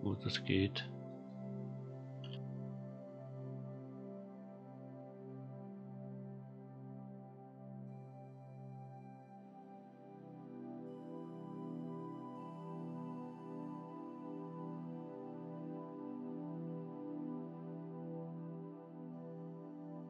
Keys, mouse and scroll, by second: 0.4-1.0 middle drag, 0.4-0.7 scroll up 1, 2.2 KP_7, 3.5-4.7 scroll up 4, 4.7-5.2 scroll up 1, 5.4 g, 8.1 middle click, 8.8-10.1 scroll down 7, 10.1-10.6 middle drag, 11.6-12.6 scroll up 3, 12.6-13.4 shift+middle drag, 13.6-14.5 scroll up 3, 14.5-15.1 middle drag, 15.2 scroll up 2, 15.6-16.3 middle drag, 16.6-17.0 scroll down 1, 17.0-18.4 scroll up 1, 18.4 g.